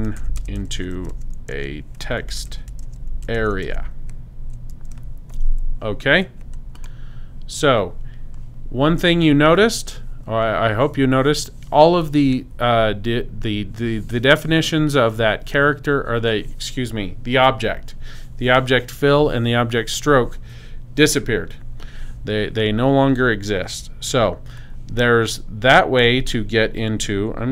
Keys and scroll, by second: 0.0-4.7 typing.